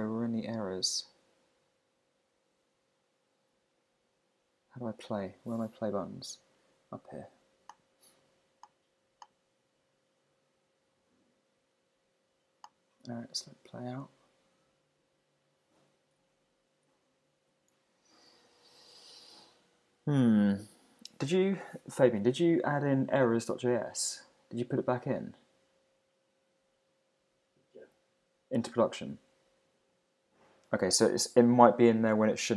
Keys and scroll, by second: 16.2 super+`, 17.3 shift+super+`.